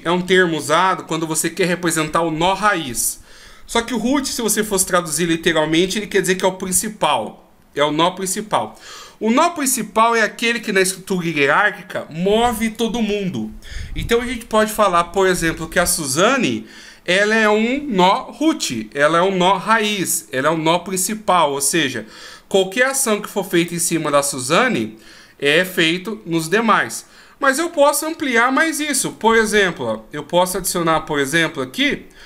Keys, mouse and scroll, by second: 29.2 shift+a.